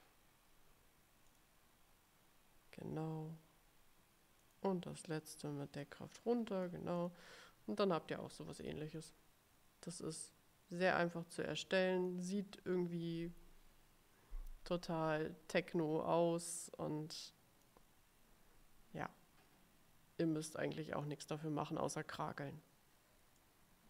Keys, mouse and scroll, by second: 1.4 click, 4.5 click, 5.9-7.0 drag, 7.1 click, 9.1 click, 10.4-12.4 drag, 16.8-18.0 drag, 20.7 click, 23.5 click.